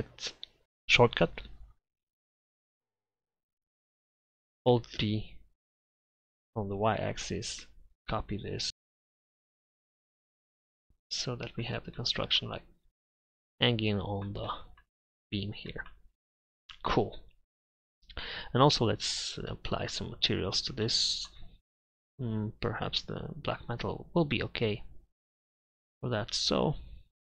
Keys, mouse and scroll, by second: 4.9 alt+d, 9.5 alt+d, 10.7 middle click.